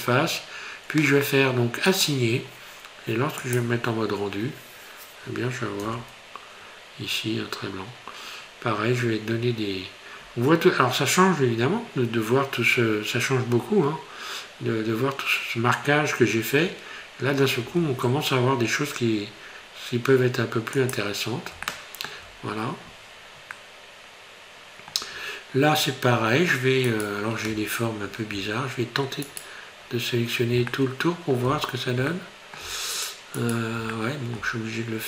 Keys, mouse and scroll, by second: 1.9 click, 3.5 click, 6.0 Tab, 13.6 scroll down 1, 14.8 scroll up 1, 17.1 scroll up 1, 17.7 Tab, 21.0 click, 21.7 shift+middle click, 22.4-23.5 scroll up 2, 23.6 middle click, 25.2 scroll up 1, 26.9 right click, 29.2 alt+shift+right click, 30.7 middle click, 32.1 middle click, 33.4 shift+right click, 34.0 middle click.